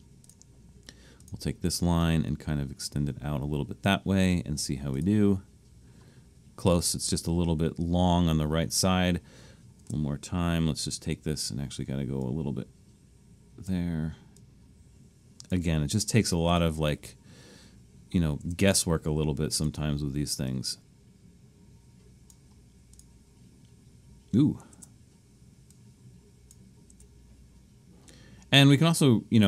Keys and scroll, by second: 9.8 Return, 18.4 Return, 24.7 Return, 26.9 Return.